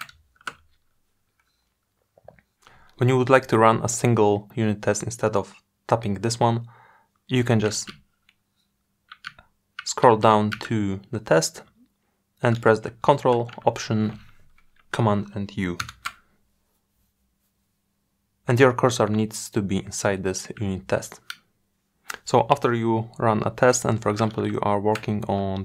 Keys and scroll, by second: 12.8 ctrl+alt+super+u.